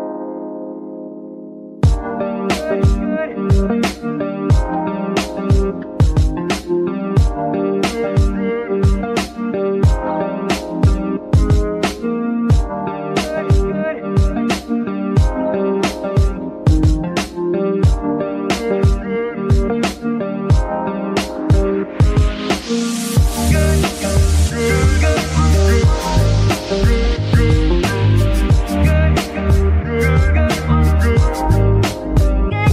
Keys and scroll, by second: 2.2 F2, 12.9 g.